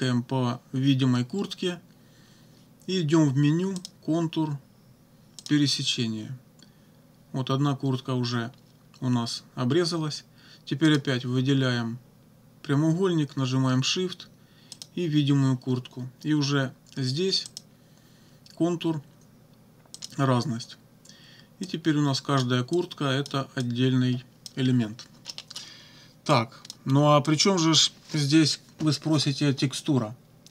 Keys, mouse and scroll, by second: 3.8 click, 5.4 click, 10.9 click, 14.8 shift+click, 17.5 click, 20.0 click, 21.6 click, 22.8 click, 23.6-24.6 drag, 25.3 middle click, 26.3 click, 27.3 click.